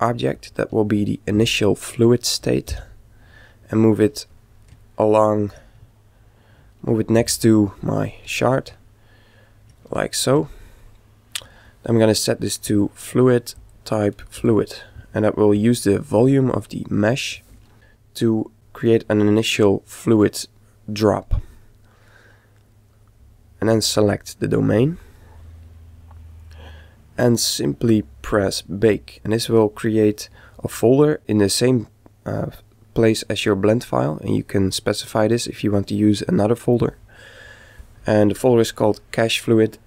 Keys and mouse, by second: 1.4 s, 2.7 g, 4.9-7.7 middle drag, 7.2 g, 8.8-12.3 middle drag, 12.6-15.2 drag, 22.8-24.8 right drag.